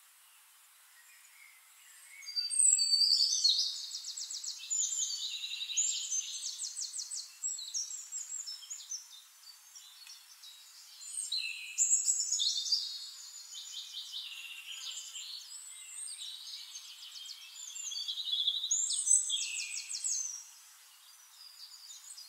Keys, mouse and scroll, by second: 0.9 click, 2.3 ctrl+click, 3.3 ctrl+t, 4.0 ctrl+click, 4.3 ctrl+a, 4.9-6.3 drag, 7.7 click, 8.4 click, 9.4 click, 10.3 click, 11.6 ctrl+click, 12.7 ctrl+click, 13.2 middle click, 13.9 shift+-, 15.0 click, 15.1 middle drag, 15.4 middle click, 15.8 middle click, 17.7 middle click, 18.4 click, 19.0 click, 19.7 click, 21.9 click.